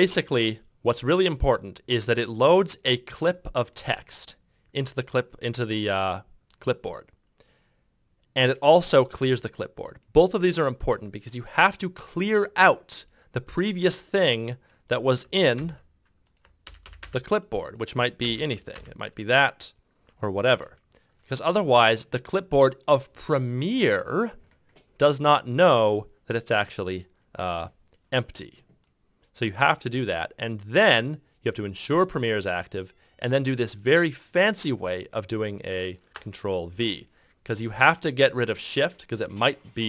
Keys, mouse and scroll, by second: 15.4 ctrl+v, 16.5 ctrl+v, 18.1 ctrl+c, 18.6 ctrl+v, 20.5 ctrl+F6, 27.4 ctrl+F6.